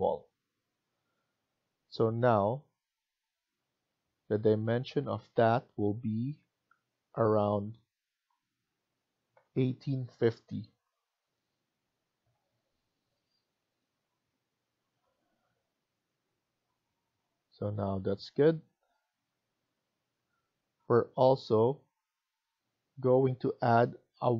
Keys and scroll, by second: 9.1-10.4 typing, 12.0 Return, 18.7 Escape.